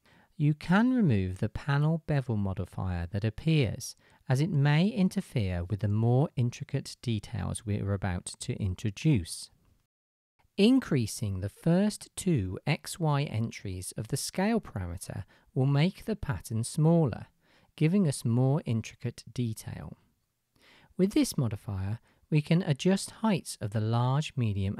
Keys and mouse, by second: 0.0-2.0 middle drag, 2.5-3.2 shift+middle drag, 8.4 middle click, 8.5-24.7 middle drag.